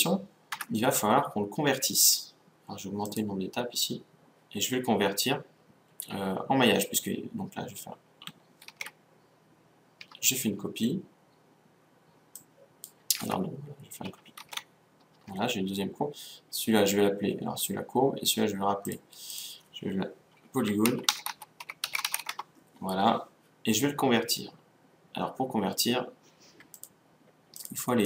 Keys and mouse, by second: 0.6 Tab, 3.1-5.0 drag, 8.8 shift+d, 12.3-13.4 drag, 13.3 Tab, 14.4 shift+d, 18.9-21.2 drag, 27.6 click.